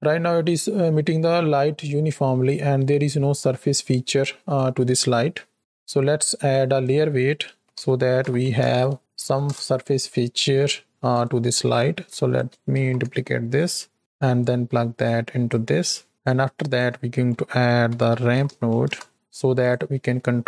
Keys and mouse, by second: 6.4-11.1 drag, 11.6 ctrl+click, 12.2 click, 12.6 shift+d, 14.4-15.4 drag, 16.0 middle click, 16.1 click, 16.4-19.6 drag, 19.9 middle click.